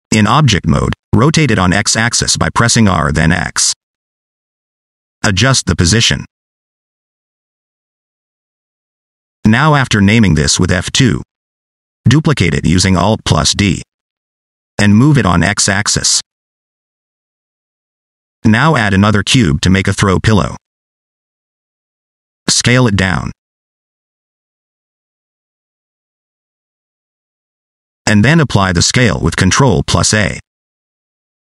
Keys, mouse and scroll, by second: 0.2 middle click, 0.6 right click, 1.5 /, 3.4 r, 4.5 middle click, 4.8 click, 5.2 click, 5.6 middle click, 6.3 click, 6.9 r, 7.6 click, 8.0-8.5 scroll down 2, 8.1 middle click, 8.3 middle click, 8.6 shift+middle click, 8.7 middle click, 9.0 shift+middle click, 11.2 F2, 12.6 alt+d, 15.5 click, 16.3 click, 19.2 shift+right click, 21.3 shift+a, 23.6 s, 26.3 s, 29.2 click.